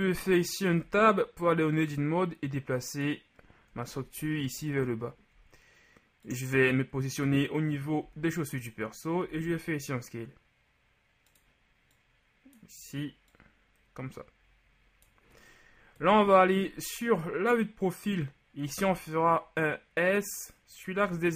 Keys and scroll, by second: 0.9 Tab, 8.1 z, 16.1 KP_3, 18.8 s, 21.0 y.